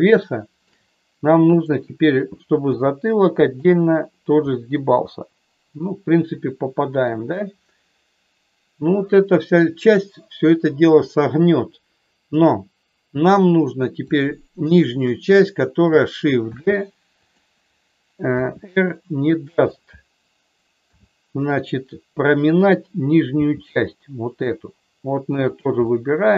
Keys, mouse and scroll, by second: 0.1 shift+middle click, 1.5 click, 2.6 g, 3.4 click, 4.5-7.0 middle drag, 14.0 shift+click, 14.8 shift+click, 16.4 shift+d, 17.1 click, 18.3 r, 19.5 click, 20.8 s, 22.5 click, 23.4 g, 25.4 click, 25.9 middle click.